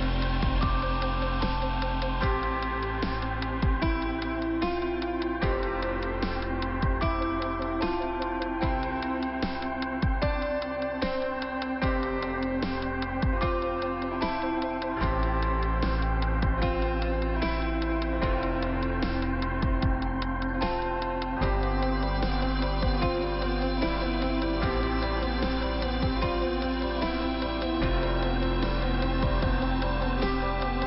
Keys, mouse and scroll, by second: 0.9 click, 1.9 click, 2.0 click, 2.2 double click, 2.7 middle click, 6.3 scroll down 2, 6.7 middle click, 9.5 scroll up 2, 11.0 middle click, 15.4 middle click, 18.3 click, 19.3 click, 20.6 click, 21.8 click, 22.9 click, 24.1 click, 25.2 click, 27.3 click, 27.4 click, 30.3 click, 30.4 click.